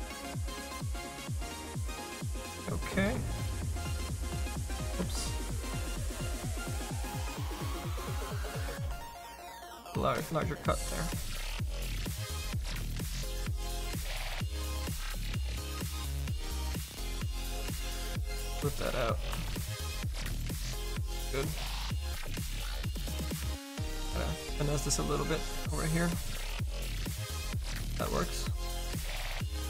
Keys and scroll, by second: 4.9 ctrl+z, 8.7 s.